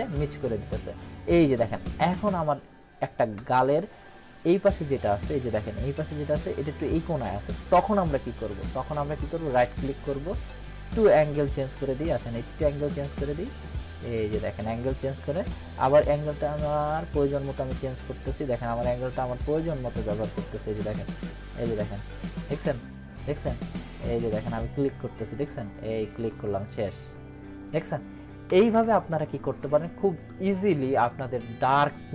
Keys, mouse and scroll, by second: 3.0 click, 4.5-6.3 scroll down 2, 16.6-18.2 drag, 24.3 click, 28.4 ctrl+-.